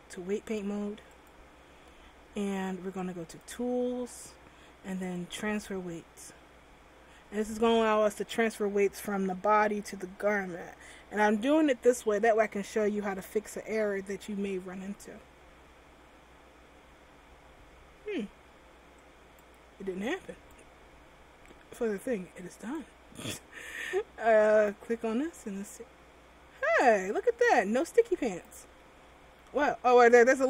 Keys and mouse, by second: 1.8-11.8 drag, 19.2-22.4 drag, 24.7 right click, 25.3 r, 28.5 right click, 28.8 r, 30.3 middle click.